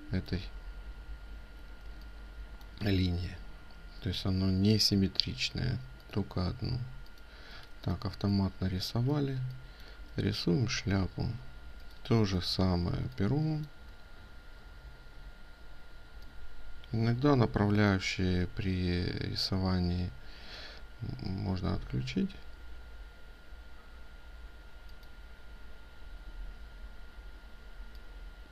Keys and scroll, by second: 12.1 ctrl+space.